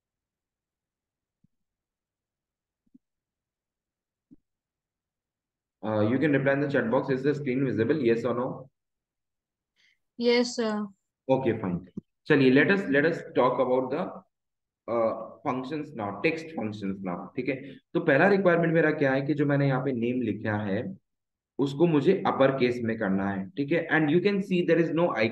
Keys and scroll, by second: 15.3 Delete.